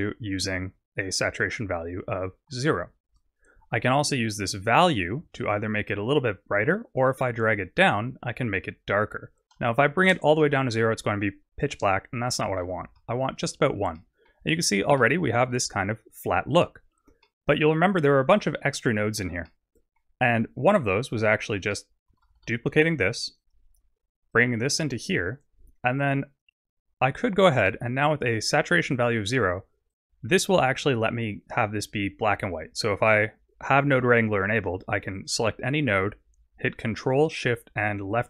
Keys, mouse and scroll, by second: 5.5 shift+click, 9.8 click, 11.7 click, 14.0 middle click, 14.5-15.2 scroll down 4, 15.0 middle click, 15.8-17.2 scroll up 4, 17.2 middle click, 19.2-19.5 scroll down 1, 19.5 middle click, 21.4 click, 22.3 shift+d, 24.4 click, 26.0 click, 27.5 click, 29.9 click, 35.1 click, 38.1 ctrl+shift+click.